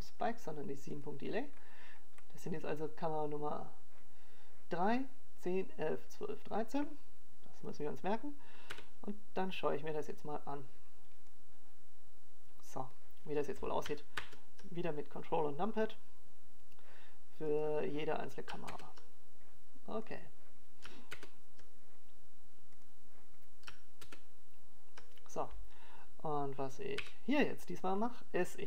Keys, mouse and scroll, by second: 2.7-3.7 scroll up 1, 3.7 click, 3.7-4.3 scroll up 2, 6.7-7.4 scroll down 2, 7.4 scroll up 1, 12.9 right click, 14.0 KP_0, 15.4 right click, 16.5 click, 19.6 ctrl+KP_0, 22.8 click, 24.1 ctrl+KP_0, 25.4 click, 26.6 ctrl+KP_0, 28.1 click.